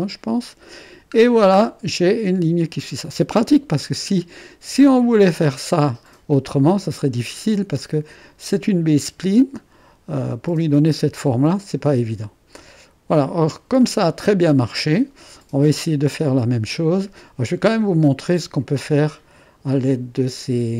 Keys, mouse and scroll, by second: 0.0 click, 1.2-3.1 middle drag, 3.1 click, 6.3-8.2 drag, 11.5 click, 15.4 click, 15.9-16.6 scroll up 1, 16.6 middle click.